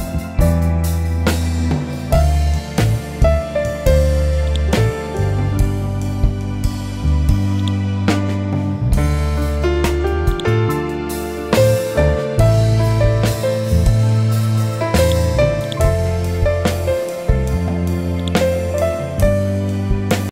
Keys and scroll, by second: 5.0 Delete, 8.7 Down.